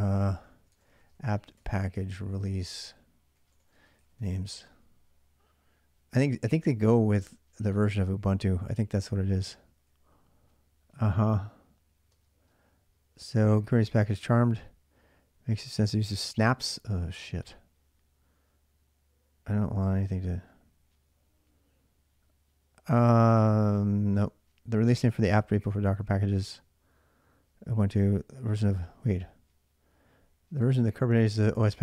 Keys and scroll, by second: 0.0-4.8 typing, 6.4-7.5 typing, 11.9 typing, 23.2-24.0 typing, 27.7 typing, 28.9 typing, 30.4 BackSpace.